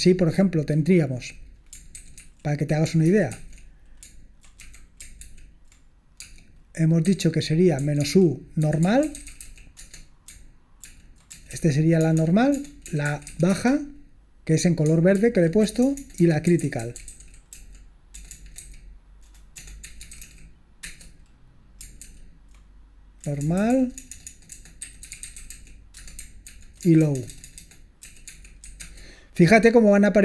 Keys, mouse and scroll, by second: 0.0 click, 2.0 ctrl+w, 2.2 ctrl+w, 3.0 ctrl+w, 3.3 ctrl+w, 4.6 a, 5.3 ctrl+p, 6.2-13.8 typing, 15.6-20.7 typing, 20.8 Return, 22.0 ctrl+p, 23.2-28.7 typing, 26.4 ctrl+p, 28.8 Return, 29.8-30.1 typing.